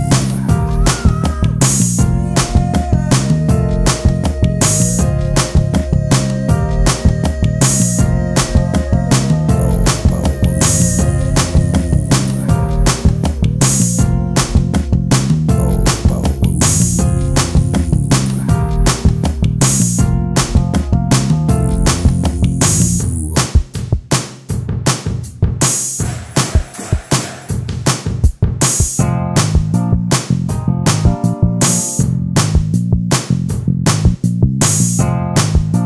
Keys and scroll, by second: 35.1 space.